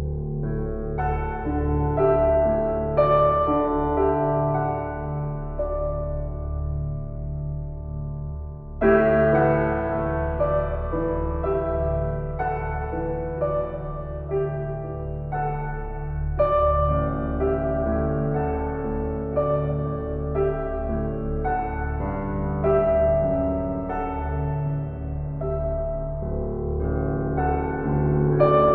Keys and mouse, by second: 1.4 1, 2.0 ctrl+alt+click, 2.9 ctrl+alt+click, 4.3 alt+shift+click, 4.8-6.1 ctrl+alt+drag, 6.3 shift+click, 8.3 ctrl+p, 9.6 Down, 10.0 Return, 11.7 shift+click, 12.7 ctrl+l, 13.9 Return, 15.3-19.2 drag, 19.4-21.3 ctrl+alt+drag, 21.5 shift+click, 22.7 shift+d, 24.2 click, 24.9 alt+shift+click, 25.3 ctrl+alt+click, 26.4-27.9 ctrl+alt+drag, 27.9 g.